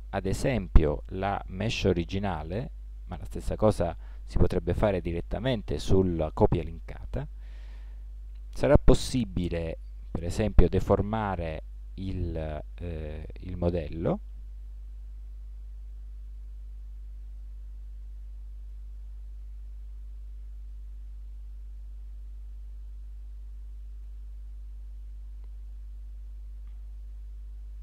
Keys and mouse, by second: 8.3 Tab, 9.2 z, 11.2 b, 13.0 a, 14.3 b, 21.8 b, 23.9 b, 23.9 a.